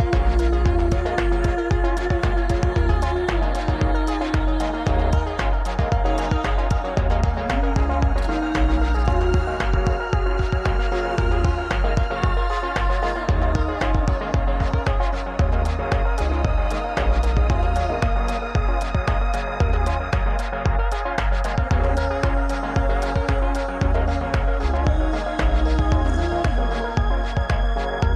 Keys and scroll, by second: 2.1 g, 4.5 ctrl+a, 6.3 alt+z, 6.4 2, 8.2 alt+z, 10.1 ctrl+a, 11.2 alt+z, 11.8 alt+z, 12.0 ctrl+a, 13.8 Tab, 14.3 s, 16.1 KP_1, 24.2 ctrl+z.